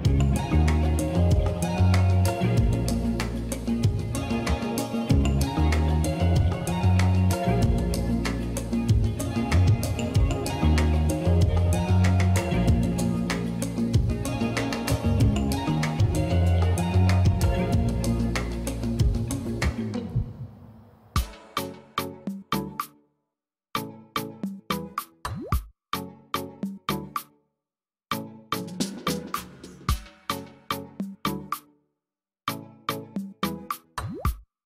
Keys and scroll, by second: 17.7 space, 24.7 space, 25.0 space.